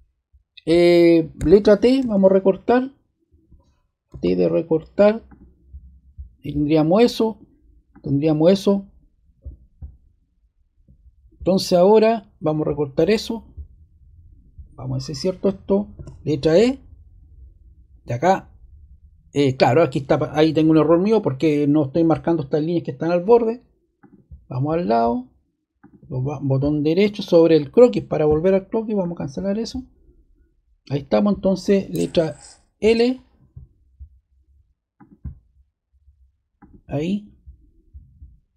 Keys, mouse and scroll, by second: 1.3 ⟲, 1.9 y, 4.1 t, 5.2 click, 7.9-9.1 drag, 12.4 click, 15.9 e, 24.4 click, 25.8-26.9 drag, 27.5-28.6 drag, 29.0-30.2 drag, 32.8-33.5 scroll down 2, 33.5-33.9 scroll down 1, 34.9 click, 36.5 click.